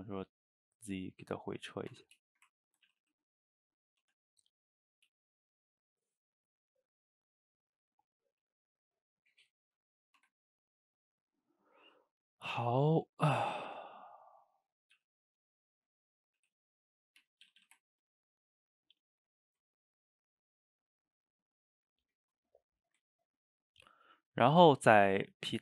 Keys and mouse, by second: 0.8-1.9 middle drag, 1.9 Tab, 2.3-2.9 ctrl+shift+middle drag, 2.9 a, 3.0 a, 3.6 click, 3.8 middle drag, 4.0 Tab, 4.8 click, 5.1 g, 6.4 click, 6.6 g, 7.3 middle click, 8.1 click, 8.3 g, 9.2 click, 9.4 g, 10.0 middle click, 10.2 Tab, 10.6-12.3 middle drag, 12.3 drag, 12.5-13.7 middle drag, 13.7 Tab, 14.8 click, 15.0 g, 16.2 click, 16.4 g, 17.0 middle click, 17.2 Tab, 17.5 a, 17.6 a, 17.8-21.2 ctrl+middle drag, 22.8 shift+right click, 23.1-24.1 ctrl+middle drag, 24.1 click, 24.5 shift+right click, 24.8-25.6 ctrl+middle drag.